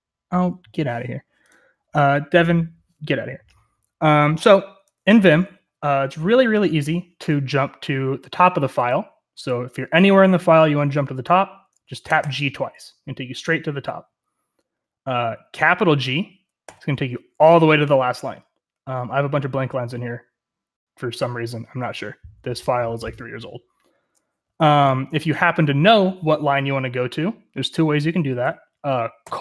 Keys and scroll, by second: 8.4-12.1 typing, 16.6 shift+g.